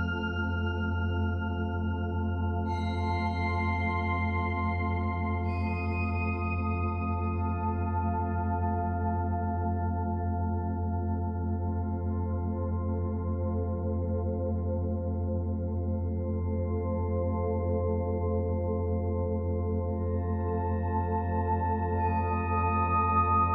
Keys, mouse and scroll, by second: 1.6 middle click, 2.0-4.5 typing, 2.5 click, 5.9 click, 6.0 l, 6.5 g, 6.7 y, 7.2 ctrl+z, 7.7 ctrl+z, 8.1 g, 9.0 g, 9.8 middle click, 10.8-11.7 scroll down 2, 11.7 middle click, 12.1 p, 12.5 Tab, 13.1 click, 13.6 click, 14.5-16.6 drag, 17.7-18.9 middle drag, 18.9 click, 19.4-20.5 drag, 20.5 middle click, 21.1 click, 21.4 click, 21.9 scroll down 4, 22.2-22.9 middle drag, 22.9-23.5 scroll up 2.